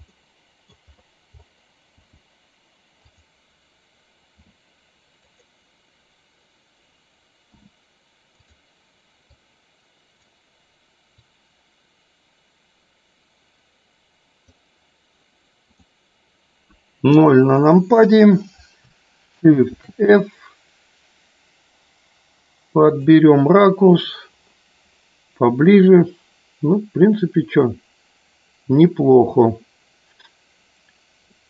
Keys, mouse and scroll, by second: 0.0 middle click, 3.0 click, 4.4 r, 9.2 click, 11.2-14.6 drag, 17.0 KP_0, 19.7 shift+f, 22.8 click, 31.3 middle click.